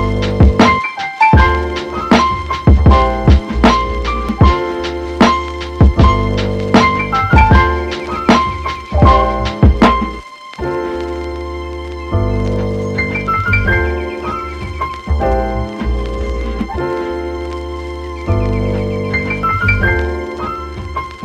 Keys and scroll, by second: 4.8 super+z.